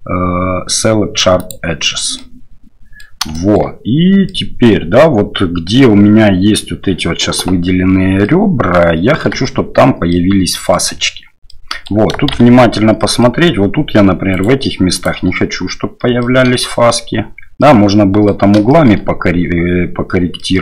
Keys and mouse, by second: 2.2 middle click, 3.3 shift+middle click, 4.2 middle click, 8.2 middle click, 9.4 shift+middle click, 10.1 middle click, 11.5 middle click, 12.3 shift+z, 13.0 middle click, 14.3 shift+right click, 14.9 shift+right click, 16.2 shift+middle click, 16.6 middle click, 17.6 middle click, 18.7 shift+middle click, 20.4 middle click.